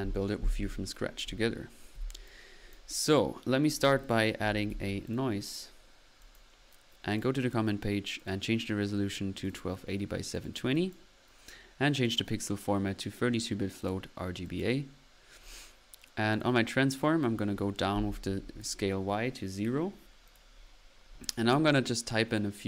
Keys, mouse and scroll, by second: 0.7 Delete, 1.2 middle click, 1.9 p, 2.3-3.1 drag, 3.7 click, 4.4 n, 5.1 drag, 5.8 click, 6.5 drag, 7.1 click, 8.2-8.7 drag, 9.4 click, 10.3-11.0 drag, 10.8 right click, 12.0 click, 12.0 right click, 13.8 click, 14.4 click, 15.5 click, 16.3 click, 17.2 click, 18.1 typing, 20.3 click, 22.1 typing.